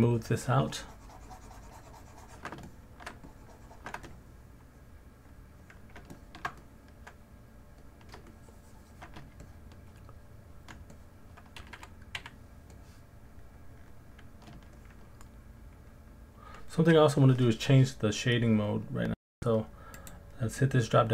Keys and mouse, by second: 0.0-1.8 shift+drag, 2.7 alt+middle click, 3.3 shift+click, 4.1 middle click, 4.1 alt+click, 4.5 alt+middle click, 4.7 alt+click, 5.3 alt+click, 6.1 ctrl+alt+click, 6.6 alt+click, 8.3 shift+click, 9.4 alt+click, 10.1 click, 10.9 alt+click, 12.2 f, 13.2 click, 13.6 click, 14.8-16.3 alt+middle drag, 20.0-21.1 drag.